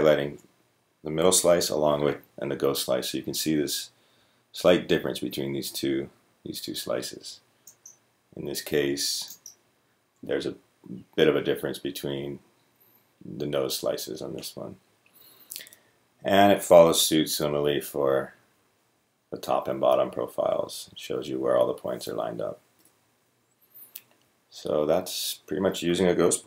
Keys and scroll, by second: 2.1-5.5 typing, 8.6 space, 8.6-12.2 g, 16.8-21.7 typing.